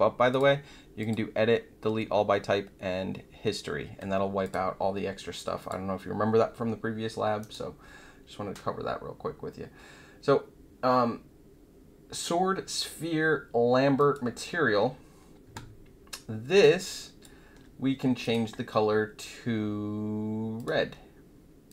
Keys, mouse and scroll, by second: 0.3 click, 0.9 click, 4.4 click, 5.5 click, 7.4 right click, 13.9 click, 16.6 alt+click, 18.2 click, 20.5 click, 21.6 click.